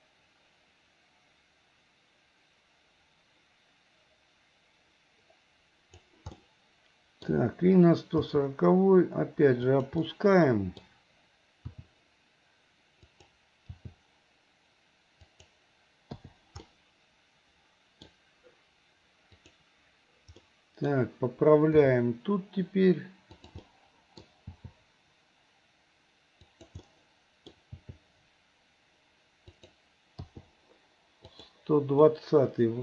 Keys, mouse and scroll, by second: 6.4 middle click, 8.2 g, 10.1-11.3 middle drag, 11.6 r, 13.7 g, 16.2 i, 16.7-18.1 middle drag, 19.5 click, 20.5 middle click, 21.7 g, 23.7 middle click, 24.6 g, 26.8 middle click, 27.8 g, 30.3 i, 31.4 click, 32.1-32.8 middle drag.